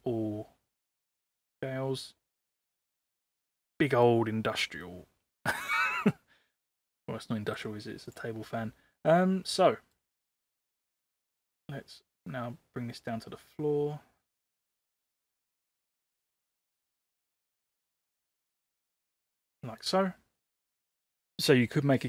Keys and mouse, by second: 1.7-4.0 middle drag, 4.8-7.5 middle drag, 8.0 click, 8.9-9.9 middle drag, 10.8-11.5 middle drag, 12.2-19.5 drag, 19.7 click, 20.3 middle click.